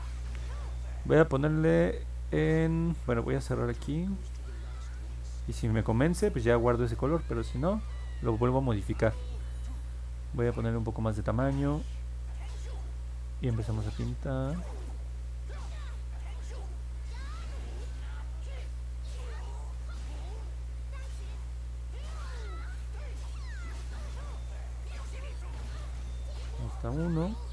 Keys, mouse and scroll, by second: 14.1-25.2 drag.